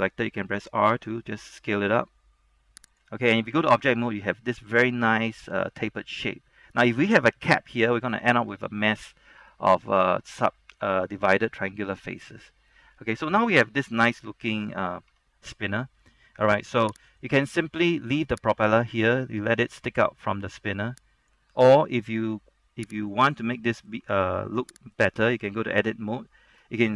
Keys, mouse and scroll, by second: 0.5 s, 3.1 click, 3.6 Tab, 4.0-11.4 middle drag, 11.4-12.9 middle drag, 13.1 scroll down 1, 13.2 middle click, 13.7-14.6 scroll up 1, 14.6 Tab, 15.1 scroll down 1, 15.2 Tab, 16.9 shift+middle click, 17.2 right click, 17.6 scroll down 1, 17.8 shift+middle click, 18.8-21.6 drag, 21.6-22.4 scroll up 1, 22.4 Tab, 22.7-23.2 scroll up 1, 23.2 right click, 23.6 middle click, 24.1 Tab, 24.6-25.1 scroll up 1, 25.1 right click, 25.5 Tab, 26.0 middle click, 26.3 shift+middle click.